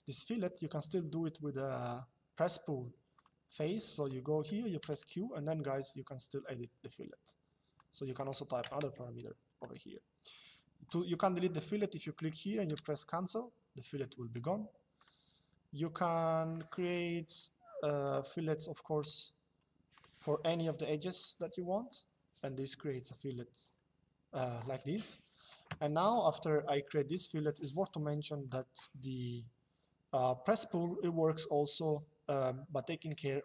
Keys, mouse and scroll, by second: 1.4 click, 2.9 click, 8.3 KP_2, 8.7 Return, 10.6 click, 12.4 Delete, 14.6 click, 16.3 click, 20.9 click, 25.4 KP_Enter, 28.1 click.